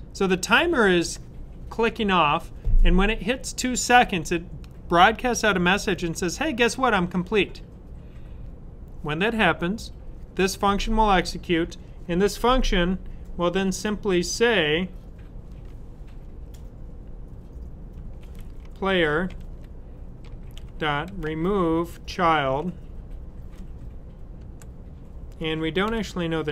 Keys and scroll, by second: 17.7-21.0 typing, 25.6-26.3 typing.